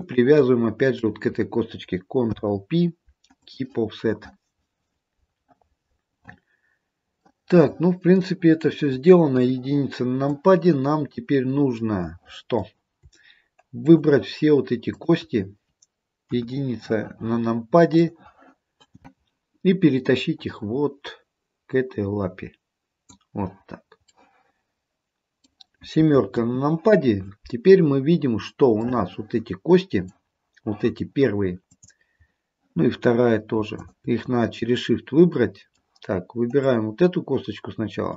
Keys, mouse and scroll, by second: 0.0 shift+click, 2.3 ctrl+p, 7.3 middle click, 8.2 middle click, 9.4 KP_1, 10.5 click, 11.9 middle click, 13.9 shift+click, 16.4 KP_1, 18.0 click, 20.2 click, 24.3 middle click, 26.4 KP_7, 29.0 middle click, 29.8 middle click, 31.8 click, 33.9 shift+click, 34.7 middle click, 36.7 click.